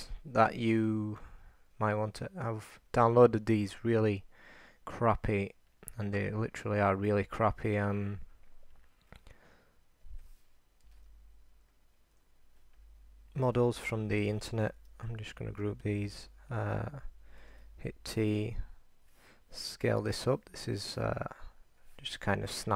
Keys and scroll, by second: 15.5 ctrl+alt+shift+g.